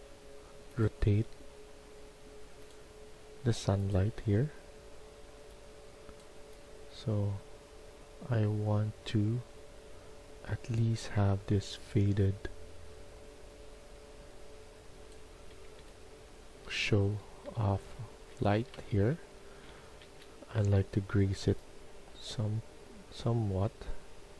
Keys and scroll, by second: 15.6-20.0 typing.